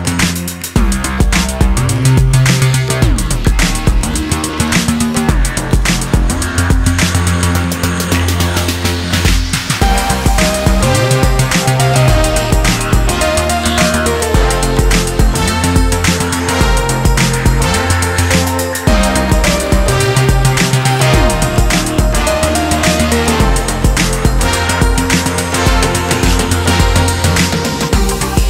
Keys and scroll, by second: 19.0 ctrl+Return, 22.1 Delete, 23.6 ctrl+d.